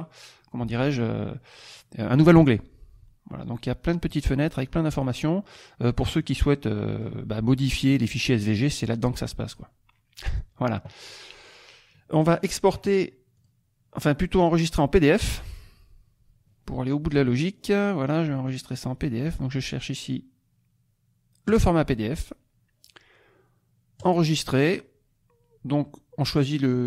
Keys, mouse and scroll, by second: 2.3 click, 3.6 click, 4.6 click, 6.2 click, 7.9 click, 8.6 click, 10.2 click, 12.3 click, 13.3 click, 14.4 click, 17.0 click, 17.5-18.8 scroll down 2, 21.5 click, 23.9 click.